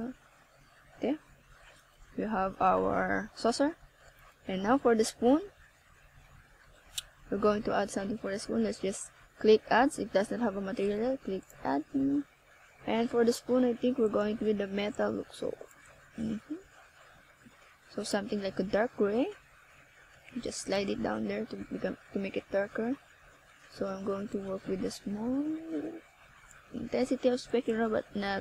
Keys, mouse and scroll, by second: 1.1 click, 2.3 click, 5.2 click, 7.5 click, 11.3 click, 12.6 click, 14.6 scroll down 1, 15.6 click, 17.5 scroll down 1, 19.1 right click, 19.9 right click, 20.4 right click, 21.3 ctrl+s, 24.2 click, 25.6 click, 27.6 ctrl+s.